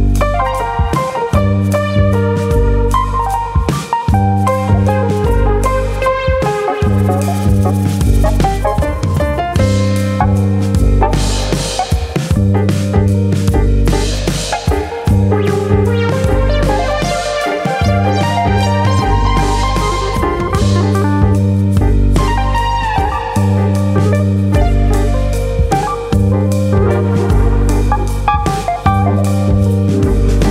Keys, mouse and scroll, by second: 0.5 alt+click, 1.2 g, 2.1 click, 2.2 middle click, 3.1 click, 3.9 click, 4.3 shift+click, 4.5 shift+click, 5.0 g, 5.9 click, 6.4 click, 6.7 shift+click, 7.4 g, 8.5 click, 9.1 click, 9.9 g, 10.6 click, 10.9 click, 11.1 g, 11.7 click, 11.9-12.5 scroll up 2, 12.2 shift+middle click, 12.5 middle click, 13.6 click, 14.0 ctrl+click, 14.8 g, 15.8 click, 16.0 middle click, 16.7 click, 17.3 middle click, 17.8 click, 18.0 middle click, 18.4 scroll up 2, 18.7 shift+middle click, 18.9 middle click, 19.4 click, 20.0 middle click, 20.4 middle click, 20.8 shift+middle click, 21.3 click, 21.5 middle click, 21.9 click, 22.7 click, 23.7 click, 24.0 middle click, 24.4 Tab, 24.4-25.2 scroll down 4, 24.7 middle click, 25.2 middle click, 25.4 scroll down 1, 25.7 middle click, 28.0 KP_1, 29.1 a, 29.9 click.